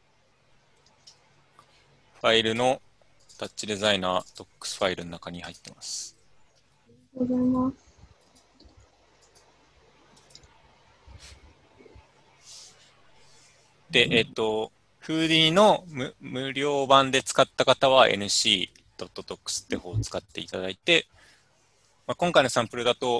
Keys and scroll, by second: 3.4 alt+Left, 3.4 alt+Right, 7.2 u, 10.5 alt+Tab.